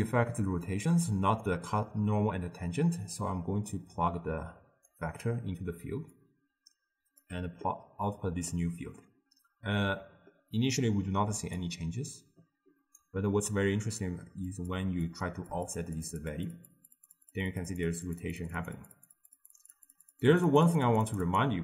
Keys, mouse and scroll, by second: 0.7 click, 1.5 click, 3.3-6.2 drag, 8.5-11.4 middle drag, 11.4 d, 11.6-14.6 right drag, 14.6-21.6 drag.